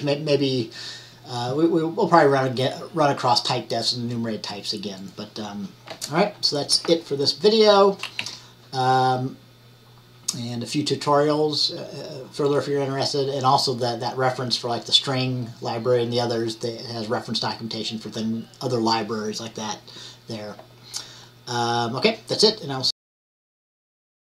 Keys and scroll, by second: 8.3 Down.